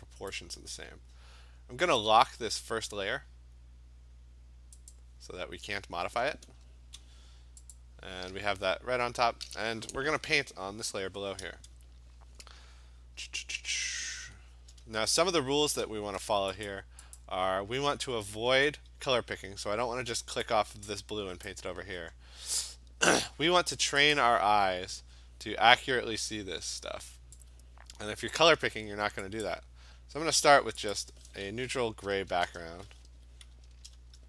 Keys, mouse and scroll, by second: 2.0 click, 4.9 click, 7.8 click, 15.0 click, 15.1 scroll, 15.5 scroll down 1, 15.6 scroll, 16.7 click, 17.2 click, 20.5 alt+click, 21.5 click, 21.8 ctrl+z, 24.2 click, 28.4 click, 29.5 click, 31.0 click, 32.2 BackSpace, 33.1 Escape, 33.7 alt+BackSpace.